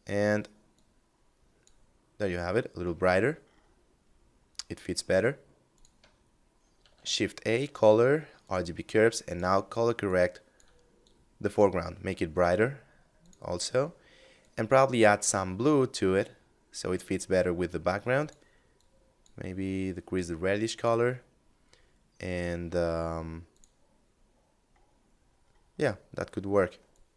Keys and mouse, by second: 2.3 middle click, 4.9 click, 6.0 shift+a, 7.6 click, 12.3 click, 17.3 click, 22.5 click, 24.2 middle click, 26.0 click.